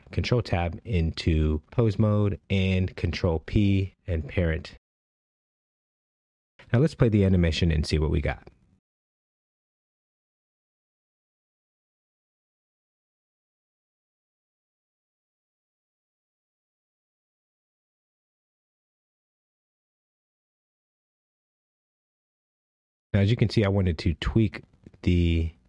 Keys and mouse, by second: 2.0 ctrl+Tab, 2.7 click, 4.4 ctrl+p, 7.0-7.7 shift+middle drag, 10.1 space, 19.2 space, 23.0 click, 25.2 click.